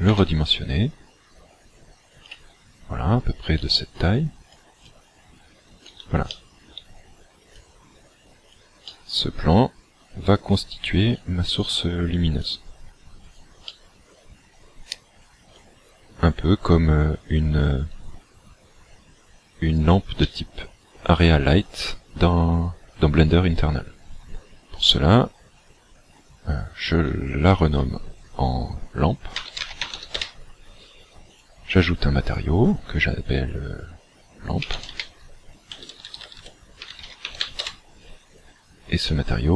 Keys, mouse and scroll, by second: 0.1 s, 2.4 click, 3.6 click, 4.9 middle click, 6.4 shift+middle click, 7.6 click, 8.8 middle click, 11.2 click, 12.5 click, 13.8 middle click, 20.2 middle click, 27.5 ctrl+click, 31.3 click, 32.3 click, 39.0 click.